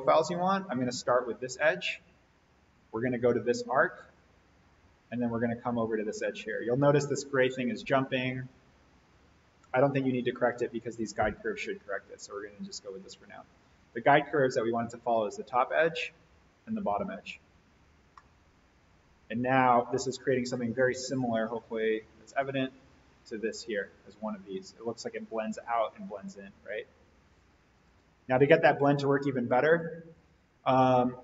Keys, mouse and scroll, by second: 1.5 click, 3.8 click, 6.4 click, 12.7 click, 17.6-17.9 scroll down 1, 18.1-20.7 middle drag, 21.3 click, 22.5 click, 27.7 click.